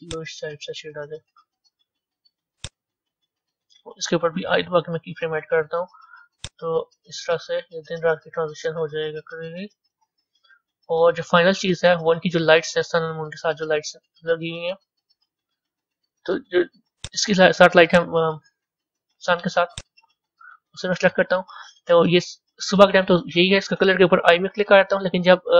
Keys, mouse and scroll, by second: 6.3-9.4 drag, 10.9-11.4 scroll up 3, 12.0-12.8 middle drag, 12.8-13.3 scroll down 8, 13.8-14.8 middle drag, 14.8-15.5 scroll down 2, 15.5-17.1 middle drag, 17.1 click, 17.9 click, 18.8-19.7 middle drag, 19.7 click.